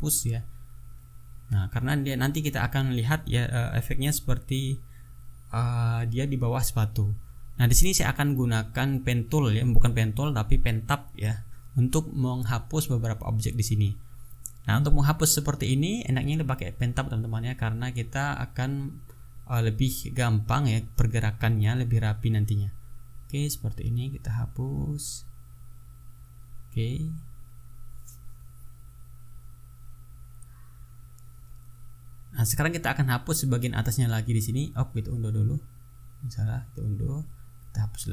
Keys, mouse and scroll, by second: 2.5 click, 7.6 click, 8.5-10.9 drag, 14.8 ctrl+middle click, 15.6-19.2 ctrl+drag, 19.6-22.7 drag, 23.0 middle click, 23.4 click, 23.8 click, 24.2 click, 24.8 click, 25.1 click, 25.8 click, 26.1 click, 26.8 click, 27.1 click, 27.8-30.5 drag, 30.6 middle click, 31.1-34.6 drag, 34.9 click, 35.4 ctrl+z, 36.2 ctrl+z, 36.4-38.1 ctrl+drag.